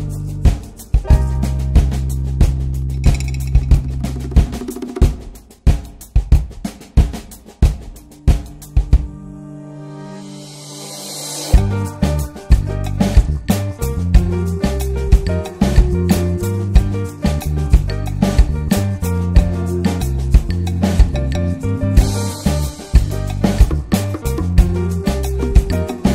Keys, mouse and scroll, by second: 0.1 scroll up 1, 0.2 shift+middle click, 1.0-2.5 shift+drag, 2.5-3.2 right drag, 3.2 drag, 3.4 scroll down 1, 3.5 middle click, 3.8 ctrl+s, 4.2 /, 4.6 click, 4.7-5.1 scroll up 2, 5.1 click, 5.4 alt+middle click, 5.8 s, 6.8 middle click, 7.1 s, 7.7-8.1 alt+middle drag, 8.1 click, 8.3 scroll up 1, 8.6 ctrl+s, 8.9 drag, 9.7 click, 10.6 click, 10.9 middle click, 11.2 click, 11.9-12.2 middle drag, 12.2-12.8 drag, 13.3 scroll down 1, 13.4 click, 13.8 Tab, 13.9 click, 14.2 l, 14.8 alt+middle click, 15.6-17.3 drag, 18.6 click, 18.8 scroll down 2, 18.9 middle click, 19.1 Tab, 19.2 click, 19.4-20.0 middle drag, 20.7 ctrl+s, 20.9 click, 21.2 scroll up 1, 21.4-21.8 shift+middle drag, 21.8 scroll down 1, 22.0 middle click, 22.4 click, 22.6 shift+a, 23.7 alt+middle click, 24.0 alt+z, 24.5-24.8 middle drag, 24.8 alt+z, 25.1-25.6 middle drag, 25.6 drag.